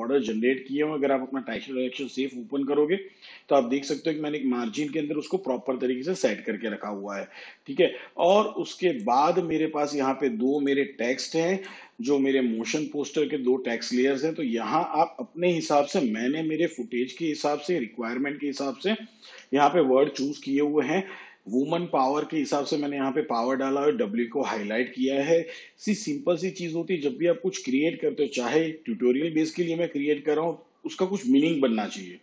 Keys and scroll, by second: 15.6 shift+/.